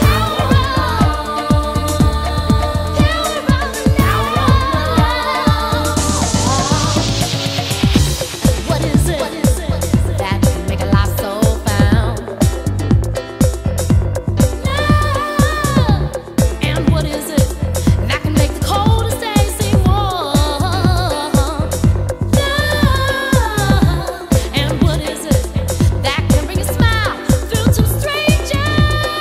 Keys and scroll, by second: 1.6 super+c, 2.3 super+v, 7.4 super+Tab, 24.7 super+Tab, 28.4 super+space.